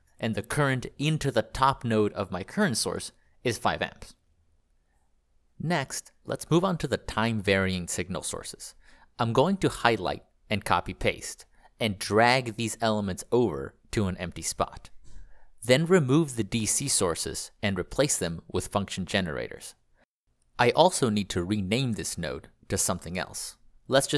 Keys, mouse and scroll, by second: 4.2 Escape, 4.5 click, 5.4 ctrl+click, 6.6 click, 7.9 ctrl+c, 8.4 ctrl+v, 11.3 ctrl+click, 14.7 click, 15.8 click, 16.9 Delete, 19.1 click, 21.0 click, 23.3 Right, 23.6 BackSpace, 23.9 BackSpace.